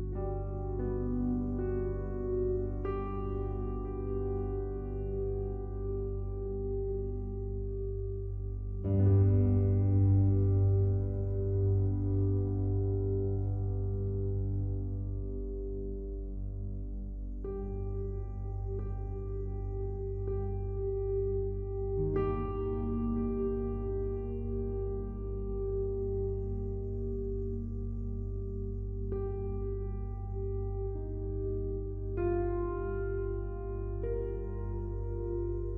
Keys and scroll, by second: 0.2 ctrl+t.